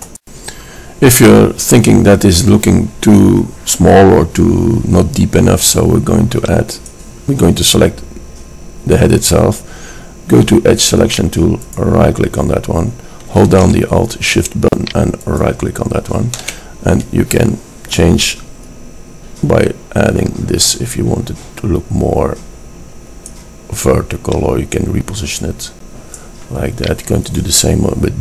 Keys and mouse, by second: 7.0-8.5 drag, 12.1-13.5 drag, 13.5-15.5 middle drag, 15.5-16.9 drag, 16.9-18.6 middle drag, 18.6 click, 26.1-27.2 middle drag.